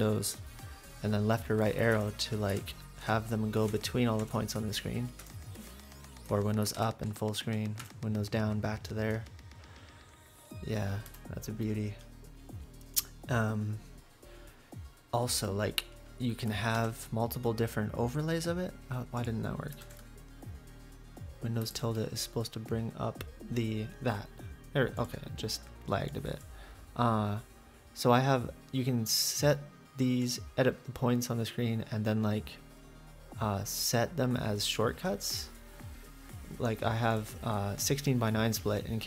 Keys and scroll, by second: 6.8 super+Up, 7.8 super+Down, 11.1 F8, 16.7 super+`.